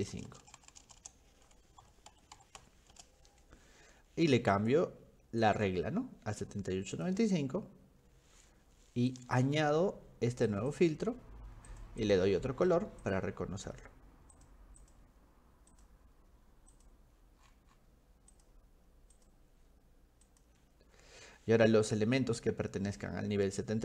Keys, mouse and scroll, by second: 3.0 Return, 4.6 click, 5.4 click, 6.9 click, 9.1 click, 10.5 click, 10.7 click, 11.7 click, 12.0 click, 13.0 click, 14.3 click, 14.8 click, 15.7 click, 16.7 click, 17.4 middle click, 17.4-17.9 scroll down 2, 18.3 click, 19.1 click, 20.3 click.